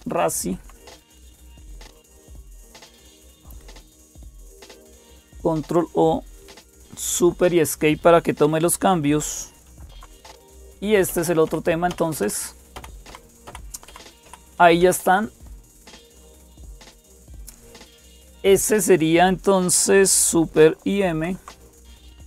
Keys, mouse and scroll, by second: 0.0-22.2 typing, 4.3 Right, 4.9 ctrl+o, 6.9 Return, 9.5 super+Escape, 11.7 alt+super+Tab, 12.5 Down, 12.9 Up, 13.2 Down, 13.7 Up, 14.0 Down, 14.4 Up, 14.6 Down, 14.8 Up, 16.1 Down, 16.1 Up, 20.9 super+m.